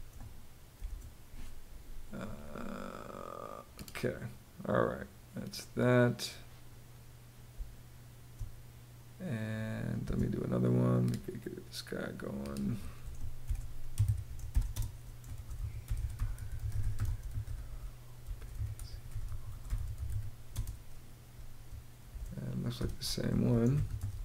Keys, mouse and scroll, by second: 1.4 click, 7.1 space, 9.6 space, 12.8-20.2 typing, 21.7-24.2 typing.